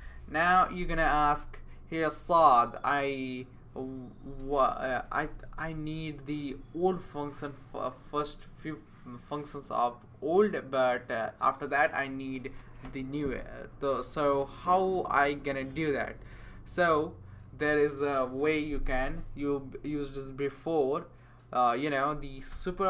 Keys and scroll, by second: 0.0-0.4 typing, 4.9-5.6 typing, 8.0 BackSpace, 22.5 Return.